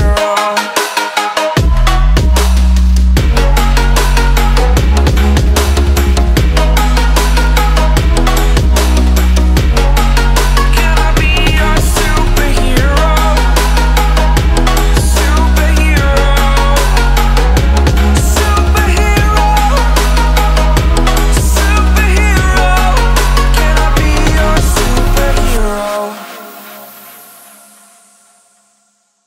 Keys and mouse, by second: 0.2 shift+click, 0.8-4.6 shift+drag, 7.0 click, 8.1 ctrl+alt+shift+e, 9.2 ctrl+z, 11.5 click, 12.8-19.7 typing, 21.9-27.5 typing, 28.3 click.